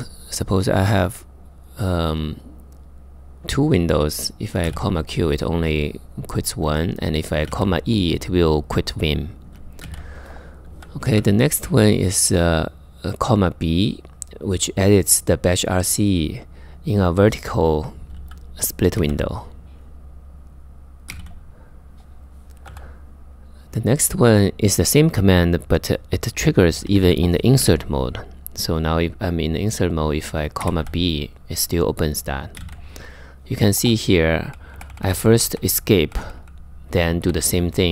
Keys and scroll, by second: 4.0-4.8 typing, 6.3-7.6 typing, 9.2-10.7 typing, 18.4-19.2 typing, 20.5-22.3 typing, 26.5-27.2 typing, 30.0-30.9 typing, 31.9-36.5 typing.